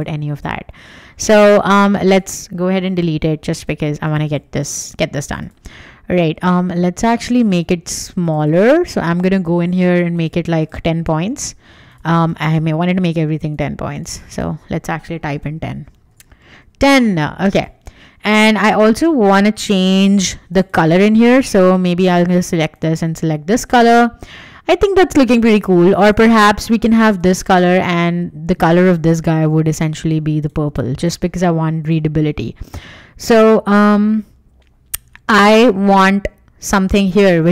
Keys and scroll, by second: 2.9 BackSpace, 7.6 super+a, 11.2 Escape, 14.9-15.9 typing, 16.5 Return, 18.4 Escape, 23.1 Escape, 27.3 Escape, 31.2 Escape.